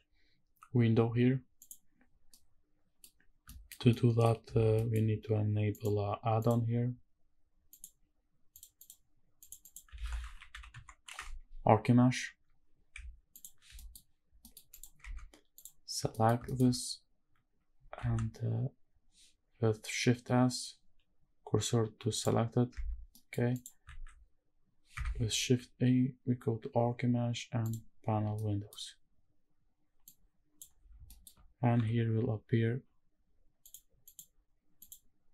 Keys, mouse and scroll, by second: 1.7 click, 2.3 scroll down 1, 2.3-3.0 middle drag, 3.2 scroll down 1, 3.5 shift+middle drag, 3.9-4.2 middle drag, 4.6 shift+scroll up 1, 4.7 shift+middle drag, 5.7-6.5 drag, 13.7 middle drag, 14.3 scroll down 1, 14.4 middle click, 14.7 click, 15.0 Tab, 15.5 click, 16.1 middle click, 16.5 shift+middle click, 16.7-17.7 scroll up 2, 18.0 shift+s, 22.7 Tab, 23.0 scroll down 1, 23.1 middle click, 23.5 click, 23.8 shift+a, 25.4 shift+a, 28.4 middle click, 30.0 click, 30.8 scroll down 1, 31.0 shift+middle drag, 31.7 n, 33.6 click, 34.0 click, 34.8 click.